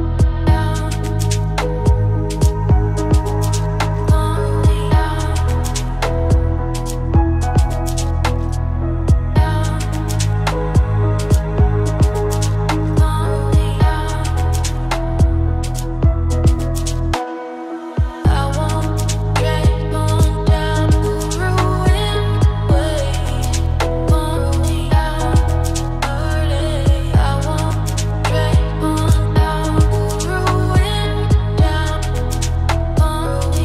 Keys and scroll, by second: 16.2 ctrl+space, 24.8 ctrl+shift+o.